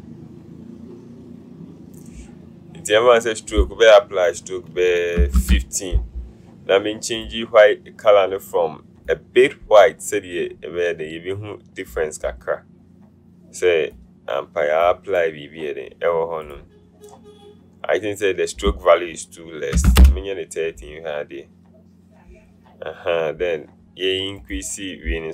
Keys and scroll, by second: 5.3 KP_1, 5.5 KP_5, 20.0 KP_3, 20.2 KP_0.